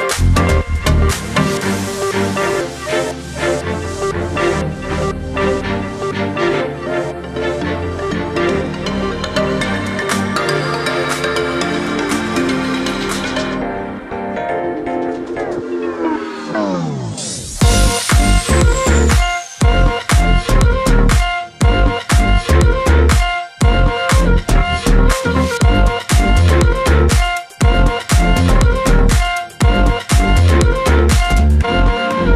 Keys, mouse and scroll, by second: 15.4-16.7 shift+drag, 19.5-22.1 alt+scroll down 3, 22.1-23.0 scroll up 2, 23.5 alt+scroll up 1, 24.3-25.1 scroll up 1, 25.1 click, 26.1-27.0 alt+scroll down 2, 27.1-27.5 alt+scroll up 1, 27.9-28.3 scroll up 1, 28.7 alt+scroll down 1, 28.9-29.3 scroll up 1, 29.3-31.9 space, 31.9 click.